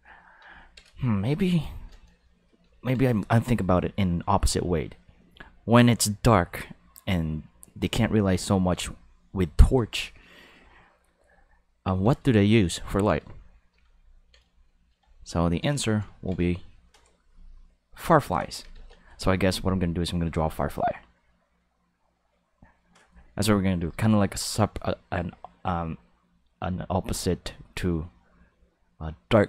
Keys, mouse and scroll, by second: 11.7 ctrl+middle click, 12.3 shift+middle click, 12.8 ctrl+middle click, 13.4 shift+middle click, 13.9 ctrl+middle click, 18.0 click, 18.7 ctrl+z.